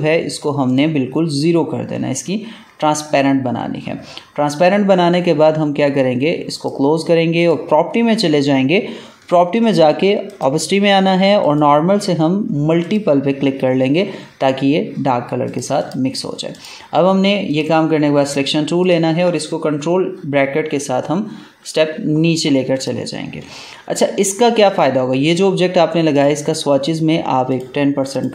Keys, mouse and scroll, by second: 6.5 click, 7.4 click, 10.2 click, 15.4 click, 20.1 ctrl+[, 22.7 click.